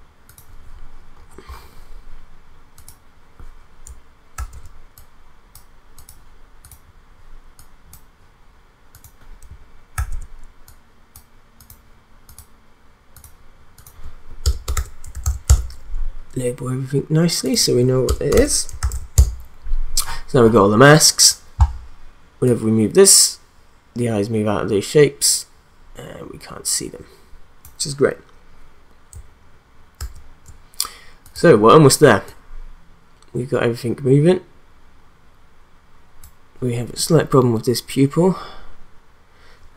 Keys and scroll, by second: 4.3 ctrl+d, 9.9 ctrl+d, 14.4 Return, 14.5-15.7 typing, 18.1 Return, 18.2-19.4 typing, 30.0 ctrl+z.